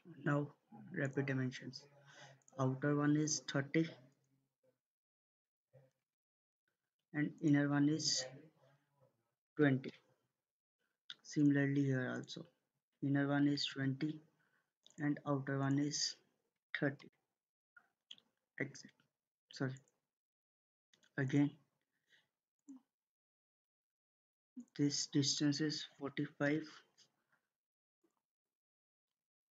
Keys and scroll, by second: 5.7-6.5 typing, 9.2-9.9 typing, 13.3 typing, 13.7 Return, 16.3-17.0 typing, 18.3 Escape, 25.5-26.2 typing, 26.5 Return.